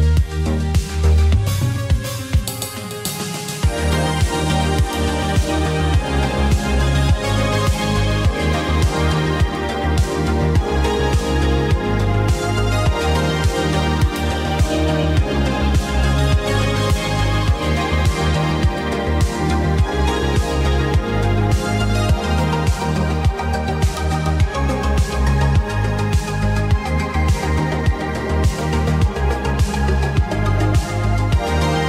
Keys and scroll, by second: 0.4 ctrl+KP_1, 2.3 w, 4.8 e, 5.0 w, 6.3-11.6 typing, 12.6 e, 12.6 w, 13.9 f, 15.6 space, 16.5 space, 22.1 Escape.